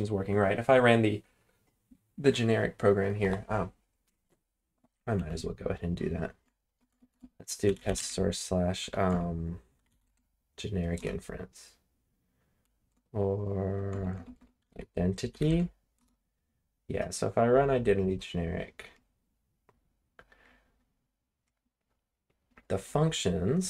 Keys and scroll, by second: 5.2 Up, 6.4-10.5 typing, 10.9 Return, 12.5 Up, 12.9-16.0 typing, 16.0 Return.